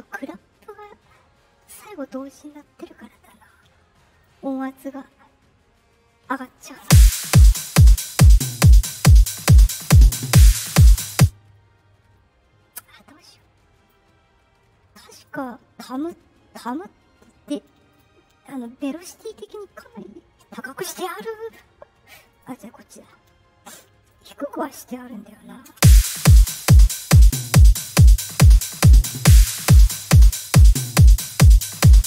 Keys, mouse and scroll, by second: 4.2-6.4 drag, 6.7 space, 7.4 click, 11.1 space, 13.3 click, 15.1 click, 15.3 click, 17.8 click, 22.3 click, 23.7 click, 24.5 click, 25.6 space, 28.5 click, 29.9 click, 30.8 right click, 31.7 click.